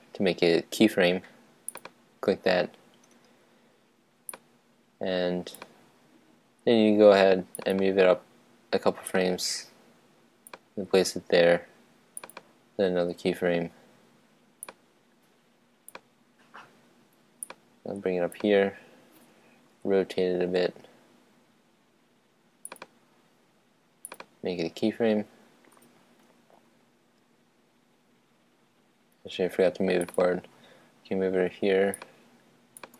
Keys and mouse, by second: 2.0-3.6 drag, 4.2-6.3 drag, 7.7-9.5 right drag, 9.2-11.1 drag, 12.3-14.3 drag, 14.8-16.5 drag, 17.6-19.2 drag, 19.8 r, 22.9-25.9 drag, 30.1 click, 30.3-31.9 right drag, 32.1-32.9 drag.